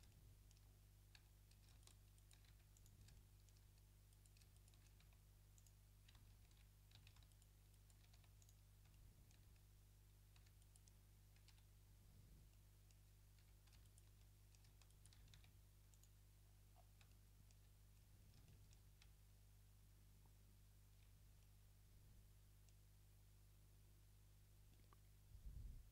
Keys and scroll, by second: 1.1 a, 2.5 w, 5.0 w, 6.6 ctrl+z, 7.0 a, 8.2 w, 10.4 a, 11.9 ., 13.4 a, 15.4 w, 19.1 Tab.